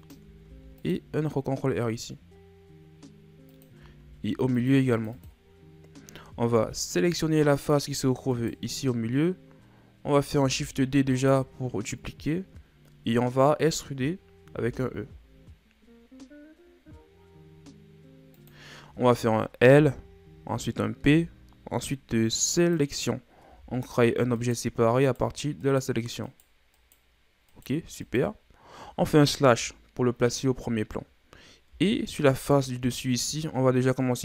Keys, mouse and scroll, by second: 0.4 ctrl+r, 4.0 ctrl+r, 5.1 click, 6.5 ctrl+Tab, 8.3 right click, 10.3 shift+d, 12.2-14.5 middle drag, 14.5 e, 21.0 p, 23.4 Tab, 23.9 scroll down 2, 24.3 right click, 25.0 right click, 25.6 right click, 26.3 right drag, 26.7 right click, 27.5 right click, 28.0 right click, 29.4 KP_Divide, 31.6 Tab, 32.3 right click.